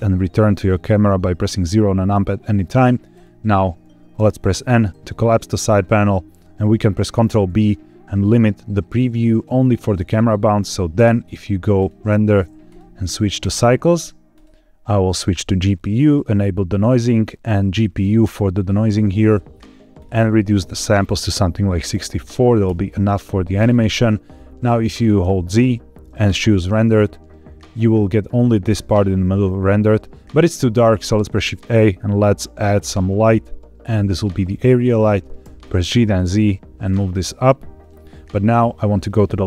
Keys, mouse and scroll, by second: 0.8 scroll down 1, 3.0 click, 5.3 n, 7.5 ctrl+b, 11.7 click, 12.6-13.5 drag, 14.2-15.3 drag, 16.0 click, 16.6 click, 16.9-17.3 scroll down 1, 17.9 click, 18.5-19.7 scroll up 2, 19.9-22.6 drag, 25.1 z, 30.9 shift+a, 34.8-35.3 scroll down 1, 35.3 g, 35.6 z, 37.7 click, 38.9 click.